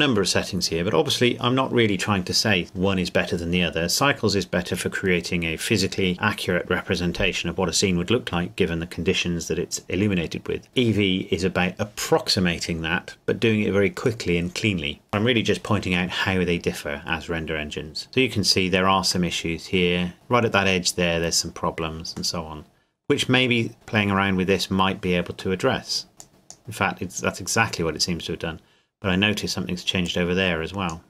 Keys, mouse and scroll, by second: 0.9-1.9 scroll down 1, 15.1-16.1 scroll down 1, 16.1 middle click, 18.4 scroll up 1, 19.3 middle click, 20.1-21.7 scroll up 1, 22.3 middle click, 25.6 middle click, 26.2 click, 30.0 click.